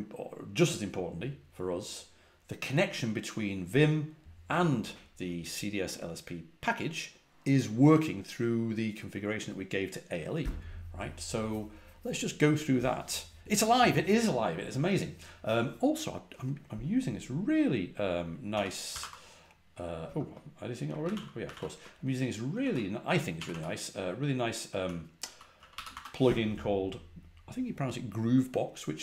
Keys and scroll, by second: 18.2-20.0 typing, 20.9 ctrl+a, 21.0 ctrl+l, 21.3 ctrl+a, 21.4 ctrl+l, 22.5-23.4 typing, 24.7-25.8 typing.